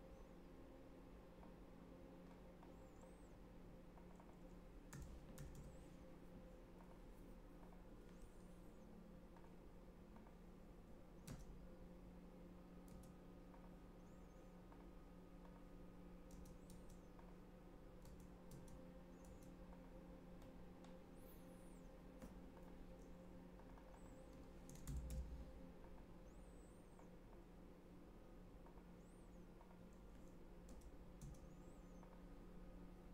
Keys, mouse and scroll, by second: 1.4 click, 2.6 click, 3.9 click, 4.1 click, 4.6-6.0 typing, 6.7 click, 7.6 click, 9.3 click, 10.1 click, 11.2 Tab, 12.9 Tab, 13.5 click, 14.6 click, 15.4 click, 16.3 Tab, 16.6 Tab, 17.1 click, 18.0 Tab, 19.0 Tab, 19.2 Tab, 19.6 click, 20.4 middle click, 22.5 click, 23.5 click, 23.7 click, 23.9 click, 24.4-25.6 typing, 25.8 click, 26.9 click, 28.6 click, 29.6 click, 30.6 Tab, 31.2 Tab, 31.9 click.